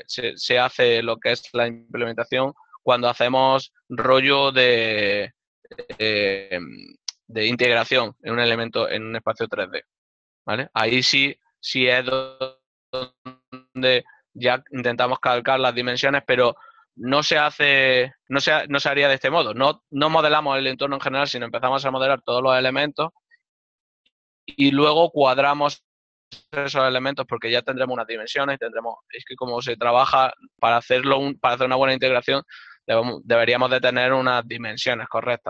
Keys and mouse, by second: 20.2 right click.